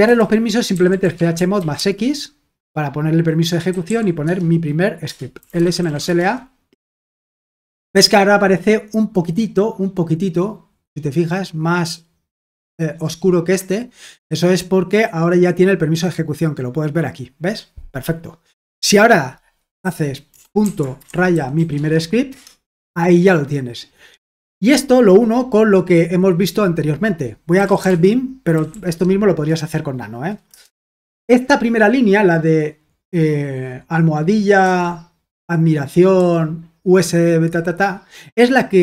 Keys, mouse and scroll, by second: 0.0-1.7 typing, 3.4-6.3 typing, 10.0-21.1 drag, 20.9-22.0 typing, 22.2 Return, 27.3-29.2 typing, 30.4-31.5 typing, 34.6 shift+i.